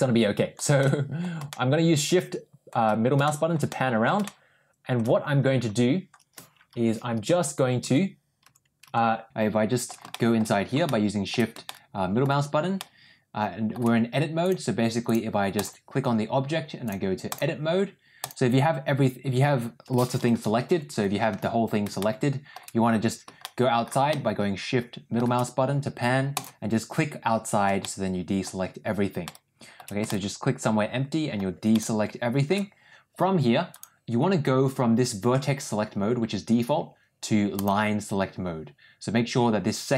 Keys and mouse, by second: 0.6 shift+middle click, 1.3-2.4 shift+middle drag, 2.5 shift+middle click, 3.1 shift+middle click, 3.5 middle click, 4.1 shift+middle click, 9.3 shift+middle click, 10.0 shift+middle click, 10.7 shift+middle click, 11.6 shift+middle click, 12.7 shift+middle click, 14.5 click, 15.5 click, 16.8 click, 18.1 click, 20.6 l, 21.9 middle click, 23.3 middle click, 24.0-25.1 middle drag, 26.3 click, 27.7 shift+middle click, 29.1 shift+middle click, 30.0-31.2 shift+middle drag, 31.6 shift+middle click, 33.6 click, 37.5 click.